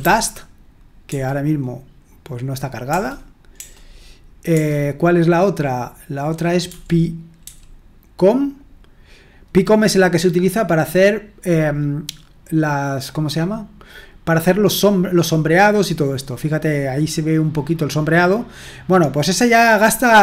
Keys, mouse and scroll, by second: 0.0-1.0 typing, 2.8 BackSpace, 3.5 BackSpace, 4.5 BackSpace, 6.6-7.4 typing.